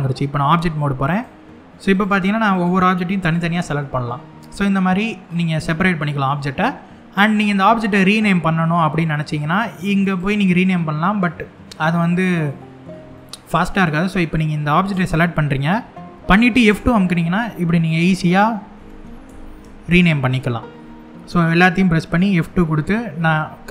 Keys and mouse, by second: 0.2 Tab, 0.8 click, 1.6 click, 2.9 click, 3.7-4.9 middle drag, 5.5-6.0 middle drag, 9.8 click, 12.2 middle click, 12.8 shift+middle drag, 14.6 click, 16.3 F2, 21.1 click, 22.8 F2.